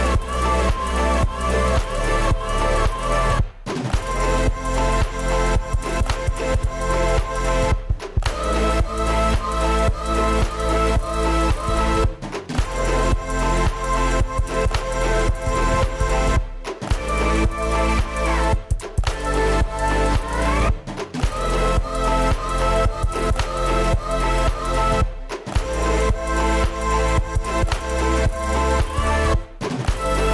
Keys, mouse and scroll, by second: 0.1 scroll up 12, 0.2 middle click, 1.9-2.4 scroll up 9, 2.4 middle click, 3.8 middle click, 4.2 space, 8.8 middle click, 9.0 Delete, 9.1 middle click, 9.3 middle click, 9.5 middle click, 9.6 space, 10.5 middle click, 11.4 y, 11.5 scroll up 5, 12.1 y, 12.3 space, 12.5 scroll up 7, 13.6 scroll down 3, 13.8 middle click, 14.0 m, 14.3-14.7 scroll down 4, 15.1 y, 15.4 shift+scroll up 3, 16.5 Left, 16.5 Right, 17.1 scroll down 4, 17.2-19.7 typing, 18.0 middle click, 18.4 scroll up 1, 18.6 scroll down 2, 24.1 middle click, 24.3 scroll down 5, 26.9 y, 27.0 scroll down 3, 27.2 middle click, 28.1 middle click, 28.5 middle click, 28.7 shift+middle click, 28.9 shift+middle click, 29.0 shift+middle click, 29.2 scroll up 6, 29.4 middle click.